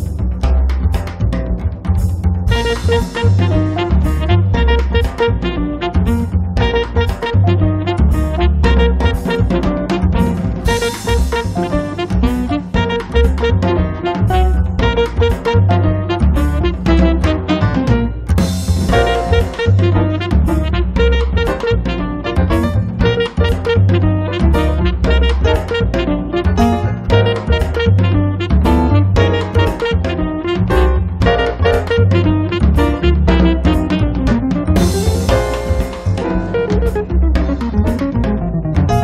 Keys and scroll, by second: 2.2 4, 2.5 Return, 3.0 space, 10.6 f, 11.8 2, 12.1 Return, 12.4 space, 13.0 p, 14.8 3, 15.1 6, 15.4 Return, 15.7 space, 23.1 r, 25.4 p, 26.3 2, 27.0 Return, 27.3 space, 30.0 m, 31.5 Up, 35.5 space.